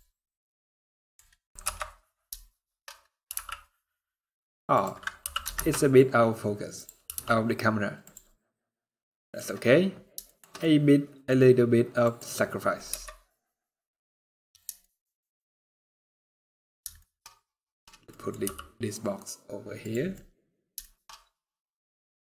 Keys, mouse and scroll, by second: 1.3 KP_0, 2.2 shift+middle click, 2.5 scroll up 3, 3.0 r, 4.9 g, 6.8 r, 8.4 scroll down 1, 8.5 middle click, 9.7 scroll down 3, 10.0 shift+middle click, 10.3 middle click, 11.0 scroll up 3, 11.7 click, 12.6 KP_0, 13.8 scroll down 2, 14.5 shift+middle click, 15.7 scroll up 4, 16.3 scroll down 1, 16.3 scroll down 5, 16.7 shift+scroll up 1, 16.7 shift+middle click, 16.9 middle click, 17.6 scroll down 1, 17.8 middle click, 18.1 g, 19.8 middle click, 20.5 shift+middle click, 20.8 scroll up 2, 21.8 middle click, 22.1 scroll down 1, 22.2-22.3 scroll up 1.